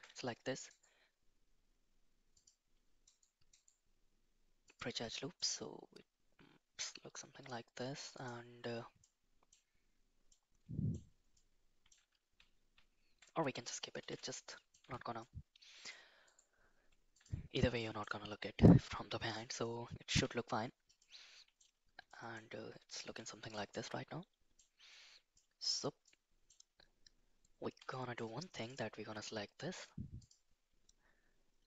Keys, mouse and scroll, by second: 0.7-3.0 right drag, 3.5-4.7 right drag, 5.4-6.8 middle drag, 8.2 click, 9.0-9.5 middle drag, 10.3-11.0 middle drag, 11.3-11.9 middle drag, 12.2 ctrl+z, 12.6 ctrl+z, 14.0 ctrl+x, 14.5 middle drag, 14.8 Tab, 15.2-15.9 middle drag, 16.3-17.2 right drag, 17.8 middle drag, 18.7-19.3 middle drag, 20.1 /, 21.0 middle click, 22.0 middle click, 23.2 shift+middle drag, 23.7-24.5 middle drag, 25.4 middle click, 26.0-26.5 middle drag, 27.9 shift+middle drag, 28.6 click, 30.2 click.